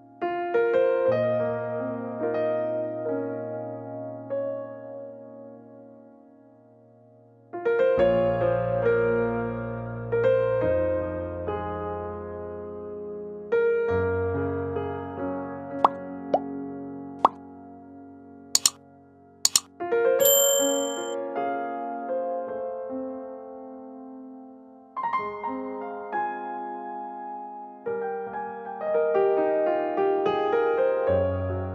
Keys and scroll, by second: 5.0-5.9 typing, 12.2 t, 15.9 space, 18.1 alt+r, 25.8 space, 28.0 Delete.